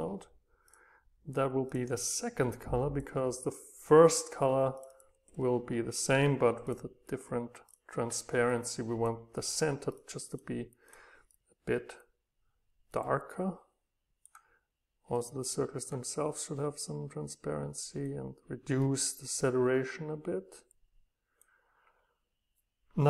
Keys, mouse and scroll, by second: 2.3 click, 2.7 click, 6.7-8.5 right drag, 8.5-10.3 scroll up 2, 10.3-11.4 right drag, 13.2 right click, 20.3-20.7 scroll down 2, 22.3-23.0 right drag.